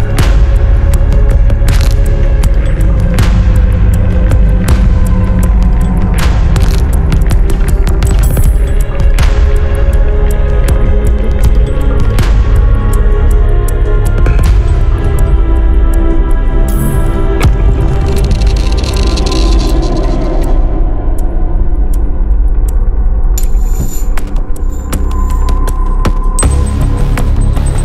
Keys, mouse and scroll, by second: 0.7 click, 1.2 scroll down 1, 2.4-2.7 scroll up 2, 3.8 click, 4.3 scroll down 2, 5.0 scroll down 2, 5.8-6.1 scroll up 2, 7.8 click, 8.7-9.1 scroll down 1, 9.6-9.9 scroll up 2, 11.4 click, 13.1 click, 14.9 click, 16.5 click, 19.0 scroll up 1, 20.1 click, 20.8-21.2 scroll down 1, 21.3 click, 22.1 scroll down 2, 22.8 scroll up 2, 24.8 click, 25.5 click, 26.3 scroll down 2, 26.8-27.5 scroll up 2.